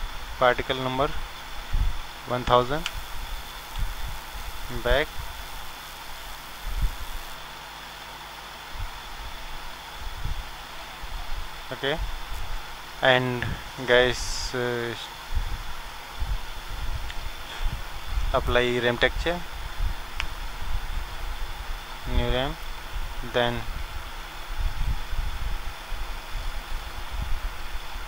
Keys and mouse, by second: 0.5-2.0 drag, 2.0 KP_0, 4.5-7.8 drag, 11.6-14.2 drag, 14.2-15.3 middle drag, 18.3-28.0 drag.